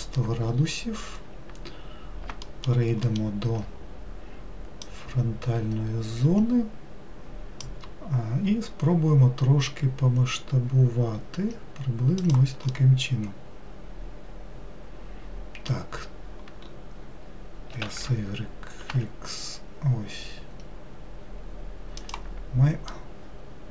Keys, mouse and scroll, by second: 2.5 alt+middle click, 3.1 alt+middle click, 4.9 click, 9.7 s, 12.8-15.8 middle drag, 17.8 s, 23.0-23.7 middle drag.